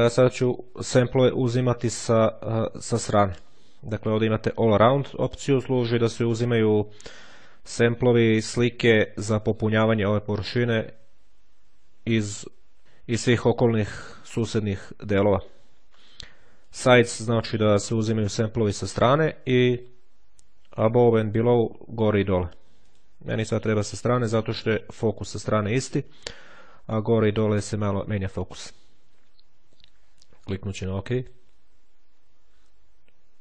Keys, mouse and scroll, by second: 1.7 click, 4.1 click, 5.5 click, 15.8 click, 19.6 click, 20.5-21.7 drag, 22.7 click, 31.1 click.